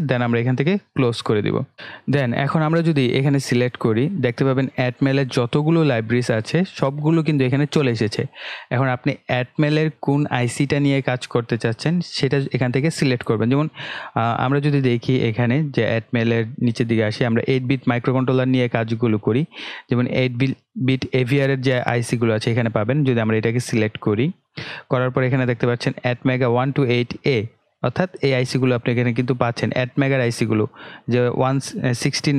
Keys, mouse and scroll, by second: 0.7 click, 1.7 scroll up 1, 23.6 click, 31.3 click.